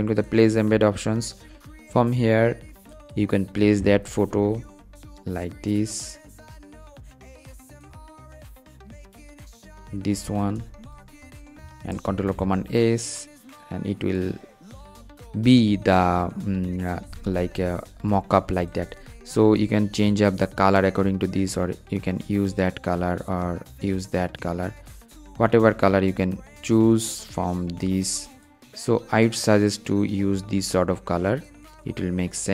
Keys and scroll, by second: 11.6 super+s.